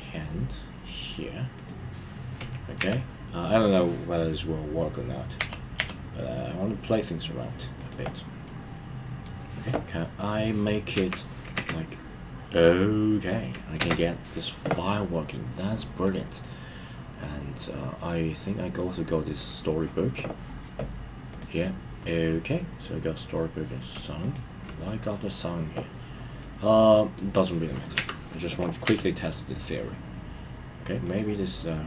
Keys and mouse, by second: 1.5 click, 2.7 KP_3, 5.3 g, 6.2 y, 7.8 click, 8.4-9.3 middle drag, 9.9-10.5 middle drag, 10.9 KP_1, 11.5 space, 13.8 space, 16.1 click, 19.3 click, 24.2 shift+click, 26.4-27.2 middle drag, 27.9 KP_1, 28.8 g, 31.0 click.